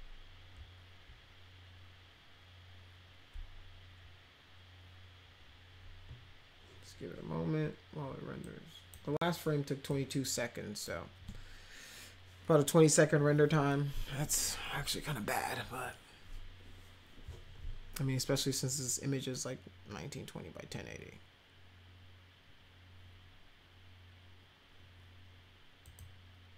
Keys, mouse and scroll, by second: 8.4 click, 9.8 click, 25.8 click.